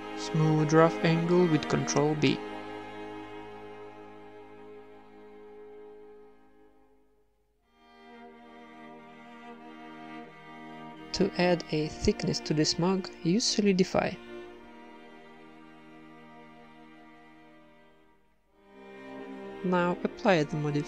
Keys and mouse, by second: 0.1 ctrl+n, 0.3 a, 0.7-1.8 right drag, 1.2 ctrl+b, 3.3 ctrl+Tab, 3.6 a, 3.6 c, 4.0-5.0 drag, 4.1 w, 5.0 Tab, 5.1 Tab, 5.3 a, 5.5 right click, 5.9 g, 6.3 Tab, 6.4-7.5 middle drag, 6.7 z, 7.0 ctrl+1, 7.8 Tab, 8.2 KP_1, 8.9 ctrl+r, 10.1 ctrl+r, 11.6 Tab, 12.5-13.9 drag, 14.3 click, 14.5 middle click, 15.1 click, 15.3 middle click, 15.4 click, 17.1 middle click, 17.3 Tab, 18.1 ctrl+r, 18.7 Tab, 18.9 middle click, 19.8 click, 20.0 Tab, 20.8 z.